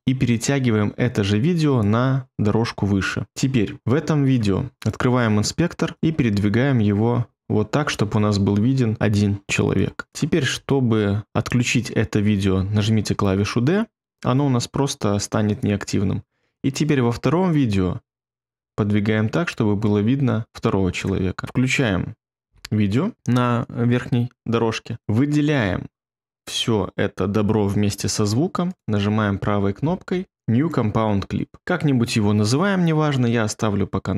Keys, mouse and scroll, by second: 13.1 d, 22.4 d.